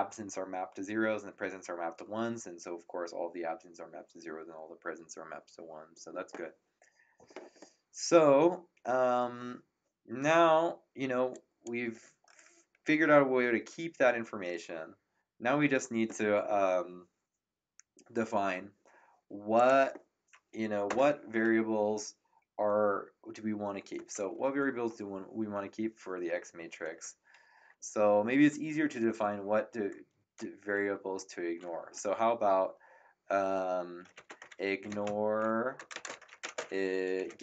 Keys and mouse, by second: 11.3 click, 19.5 click, 20.8 Return, 20.8 KP_Enter, 34.0-37.4 typing.